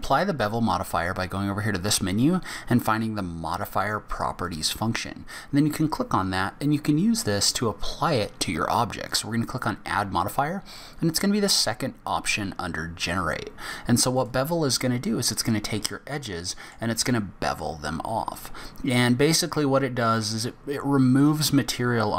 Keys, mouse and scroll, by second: 4.4 click, 9.1 click, 15.2 scroll up 1, 15.8 middle click.